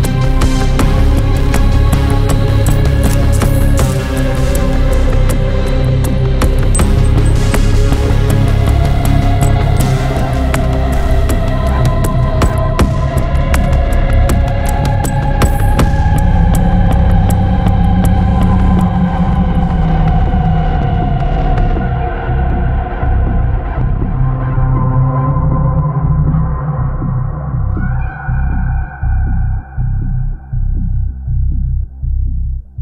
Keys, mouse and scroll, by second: 0.5 click, 1.8 click, 3.7 click, 4.6-4.9 scroll down 2, 6.0 click, 7.9 click, 9.6 click, 10.6 click, 11.7 click, 12.9 s, 14.7-16.0 drag, 16.9 click, 17.8 click, 20.4 click, 22.2 1, 23.0 0, 23.5 -, 23.6 click, 25.3 click, 26.4 click, 30.0 click, 32.1 3, 32.5 0.